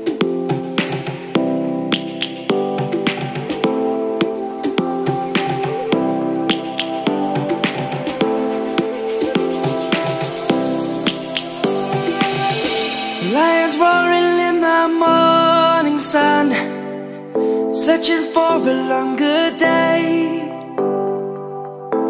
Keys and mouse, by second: 1.6 click, 2.3 middle click, 5.3 click, 8.0 click, 8.8 middle click, 11.2 Tab, 11.7 click, 14.0 shift+click, 15.5 click, 21.7 click.